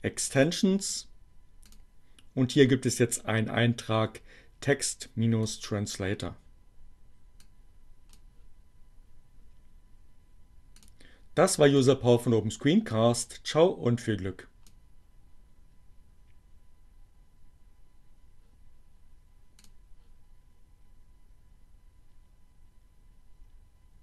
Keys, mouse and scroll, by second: 1.6 click, 4.4-5.8 drag, 7.2-8.3 drag, 10.1 click, 11.4 click, 12.2-14.8 drag, 19.7 click.